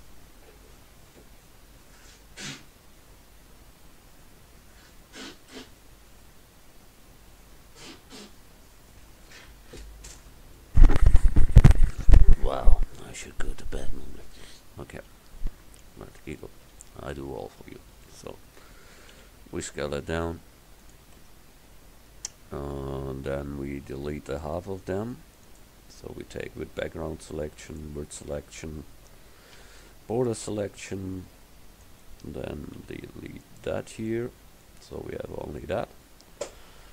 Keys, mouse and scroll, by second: 16.0 KP_7, 19.6 s, 21.3 Tab, 23.4 a, 25.5-27.6 drag, 27.8-29.6 drag, 29.6 b, 31.3 c, 32.1 click, 32.8 x, 34.1 click.